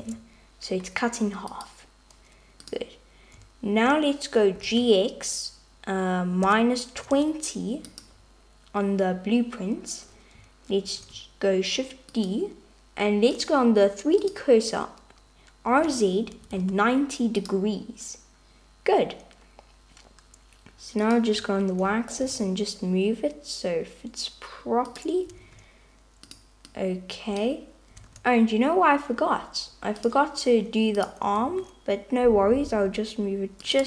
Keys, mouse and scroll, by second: 0.1 Tab, 1.6 click, 2.7 click, 4.6 g, 10.9 shift+d, 13.4-14.4 drag, 15.8 r, 22.3 g, 26.3 alt+z, 26.3 click, 26.9 click, 30.2 alt+z, 31.1 click, 31.7 shift+d.